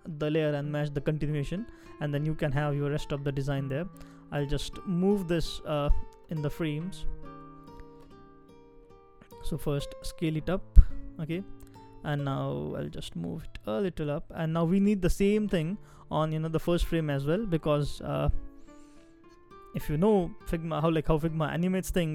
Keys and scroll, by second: 3.1 super+c, 5.4 super+x, 7.3 super+v, 13.4 Up, 13.6 Up, 17.5 super+c.